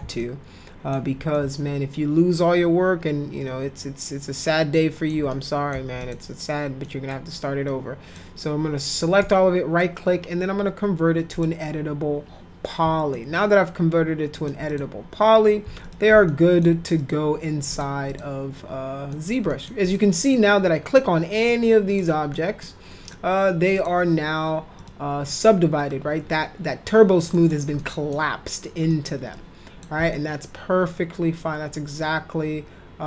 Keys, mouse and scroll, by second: 0.2 ctrl+alt+middle click, 1.3-5.1 alt+shift+middle drag, 5.3 middle click, 6.0 click, 6.8 middle click, 7.6 click, 9.2 right click, 11.3 click, 13.1-14.4 alt+middle drag, 14.7 click, 15.8 click, 16.3 alt+middle click, 17.0 click, 17.7 click, 18.1 click, 19.1 middle click, 19.5 middle click, 19.8 click, 20.2 click, 20.9 click, 21.4 click, 21.9 click, 22.3 middle click, 23.0 click, 23.7 click, 24.8 click, 27.3 middle click, 27.8 middle click, 28.9 middle click, 29.3 click, 30.1-33.0 alt+middle drag.